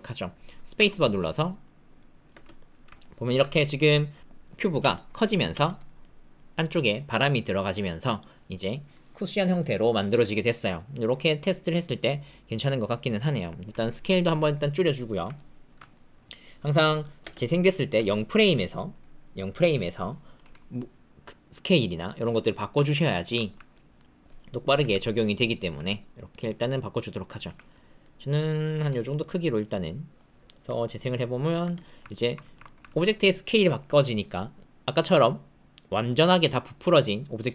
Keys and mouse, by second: 0.7 space, 2.3 space, 3.0 alt+middle click, 5.5 space, 6.0 middle click, 7.4 middle click, 11.2-13.3 middle drag, 13.9 s, 15.3 alt+middle click, 17.2 space, 17.9 space, 18.8 click, 20.4 s, 22.6 shift+middle click, 22.8 ctrl+middle click, 22.9 ctrl+drag, 23.1 shift+click, 23.3 ctrl+click, 23.7 click, 24.7 g, 25.7 s, 26.4 click, 27.4 g, 28.0 click, 28.7 s, 29.3 click, 30.6 space, 31.6 space, 31.8 click, 32.0 ctrl+click, 32.4 shift+click, 32.6 ctrl+click, 34.1 click.